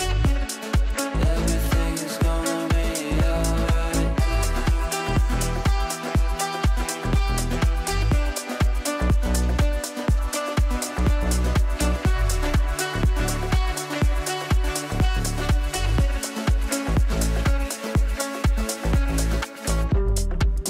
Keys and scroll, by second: 1.1 g, 16.0 g.